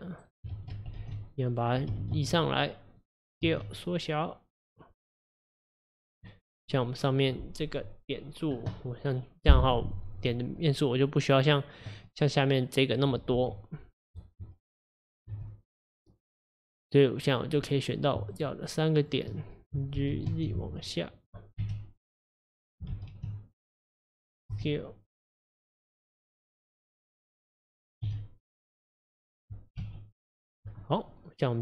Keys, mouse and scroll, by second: 0.6 ctrl+z, 1.3 click, 2.0 g, 3.5 s, 6.3 middle click, 6.9-8.9 scroll up 1, 9.3-9.9 scroll up 4, 9.9 middle click, 10.7 click, 11.6 click, 12.1-13.4 middle drag, 13.4 g, 15.3 s, 17.3 click, 17.7 middle click, 18.4 shift+click, 19.0 shift+click, 20.0 g, 21.7 KP_1, 23.0 g, 24.6 s, 26.9-28.1 middle drag, 28.1 s, 29.8 KP_3, 31.1-31.6 middle drag.